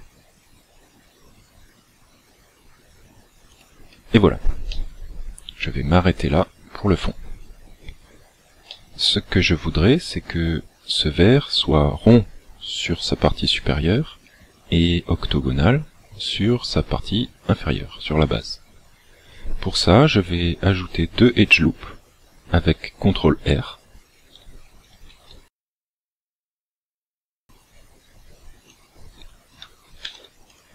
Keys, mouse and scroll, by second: 3.7 click, 4.7 middle click, 8.8 middle click, 24.9 ctrl+r, 28.8 click, 30.1 ctrl+r.